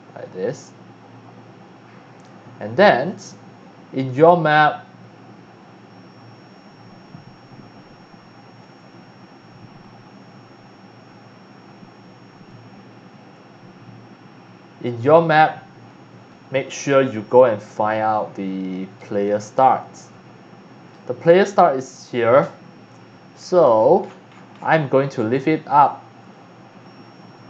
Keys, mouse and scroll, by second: 1.8 click, 3.1-20.9 right drag, 22.2 click, 23.4-24.6 scroll down 5, 25.4-27.4 right drag.